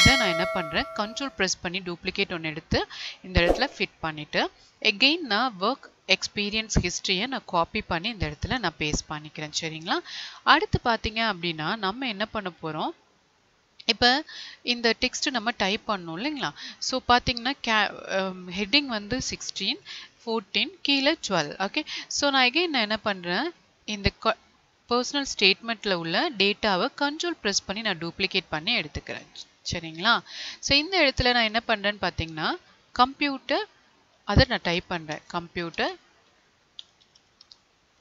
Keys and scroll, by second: 6.5 ctrl+c, 7.7 ctrl+a, 35.1 space.